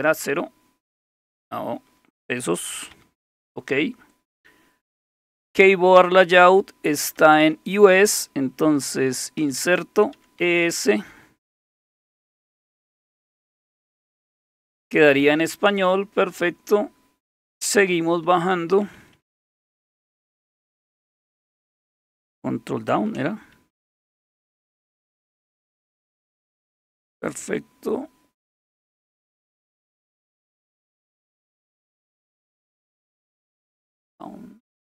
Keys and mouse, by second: 0.8 typing, 3.0 typing, 7.2 typing, 9.4-10.9 typing, 13.2 Delete, 13.8 Delete, 15.5 Escape, 15.7 Escape, 15.9 Escape, 18.2-20.5 typing, 23.9 ctrl+d, 27.4 typing, 30.9-31.6 typing.